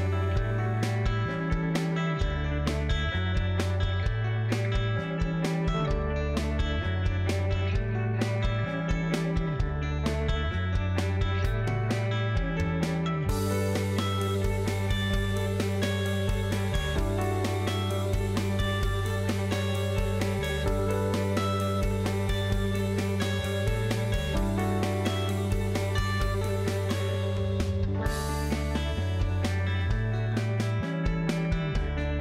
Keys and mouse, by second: 0.3 Tab, 0.6 alt+z, 1.2 click, 2.8 KP_Decimal, 3.3 alt+z, 4.1 middle click, 7.8-9.0 drag, 9.9 g, 12.6 alt+z, 13.0 Tab, 13.9 click, 14.9 Tab, 15.8 alt+z, 16.5 click, 16.7 alt+z, 17.6 g, 20.2 alt+z, 20.8 click, 21.5 alt+z, 22.0 g, 24.3 Tab, 25.5 middle click, 26.1 Tab, 26.6 alt+z, 27.6 middle click, 29.0 alt+click, 31.1 KP_3, 31.3 KP_Decimal.